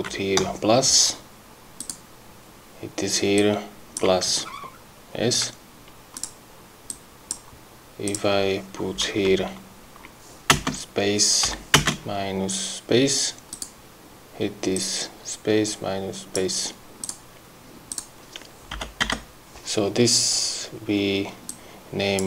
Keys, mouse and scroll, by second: 1.8 click, 3.4 click, 4.4-5.0 ctrl+scroll up 2, 6.1 click, 6.9 click, 8.1 click, 9.3 BackSpace, 10.5 space, 11.5 -, 11.8 space, 13.5 click, 14.7-16.5 drag, 17.0 click, 17.9 click, 18.7 BackSpace, 21.5 click.